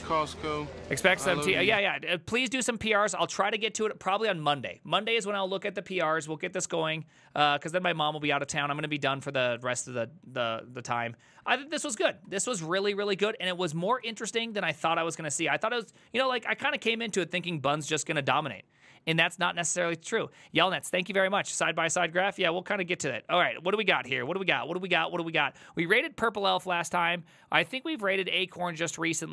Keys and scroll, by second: 4.2 alt+f, 12.3 ctrl+t, 13.0 alt+f, 13.8-15.3 typing.